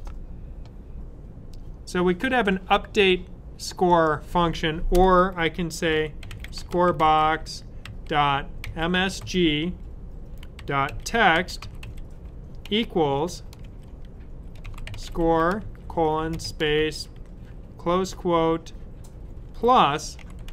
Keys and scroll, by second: 5.5-16.6 typing, 19.1-20.5 typing.